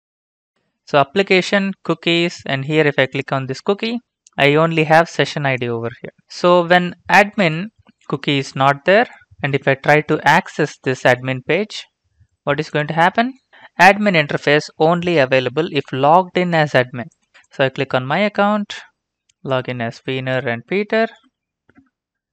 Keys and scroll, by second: 9.3 shift+Right, 10.3 ctrl+c, 11.4 alt+Tab, 13.2 ctrl+v, 20.8-21.9 typing.